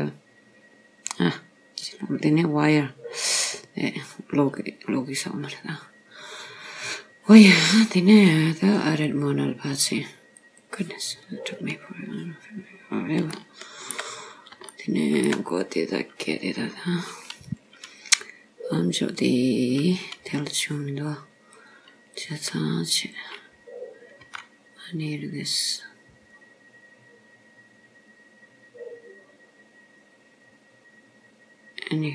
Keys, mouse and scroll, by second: 4.5-5.2 scroll up 2, 5.2 scroll down 1, 5.3-7.3 scroll down 2, 9.1 click, 11.3-11.6 scroll up 3, 12.0-13.3 scroll down 2, 13.3 shift+middle click, 14.2 scroll up 2, 14.8 shift+middle click, 16.5-17.1 scroll down 2, 21.6 click, 23.0 click, 24.3 g.